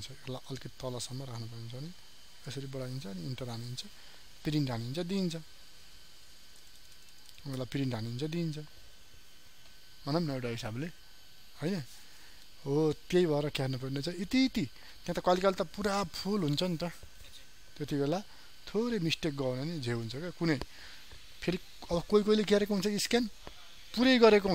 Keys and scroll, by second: 6.5 ctrl+space.